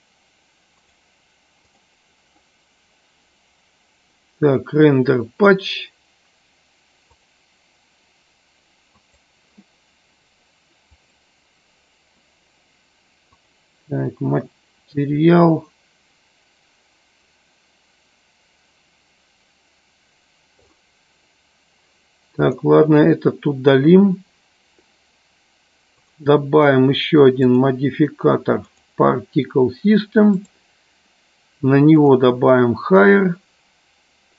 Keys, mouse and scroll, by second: 0.8 click, 7.1 click, 9.0 click, 22.2 click, 27.4-28.9 drag, 30.3 click.